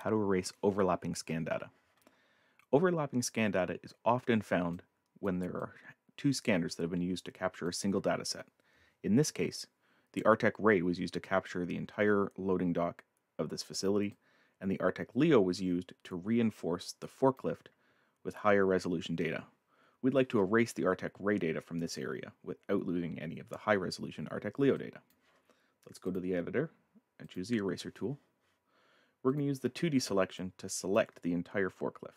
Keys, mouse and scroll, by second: 2.4-3.0 scroll up 4, 4.7 right click, 4.8 click, 5.6 click, 14.1 click, 24.8 click, 26.0 click, 27.2 click, 29.3 click, 30.4 click, 30.7 click.